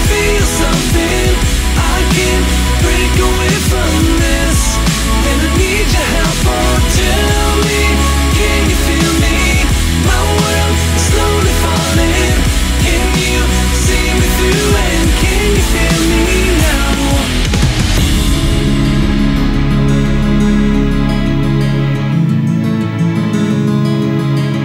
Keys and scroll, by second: 1.3 p, 1.3 scroll up 1, 4.0-4.4 scroll down 1, 6.1-7.8 scroll up 1, 10.2 scroll up 1, 19.7 ctrl+z, 20.5 ctrl+z, 21.6 ctrl+z.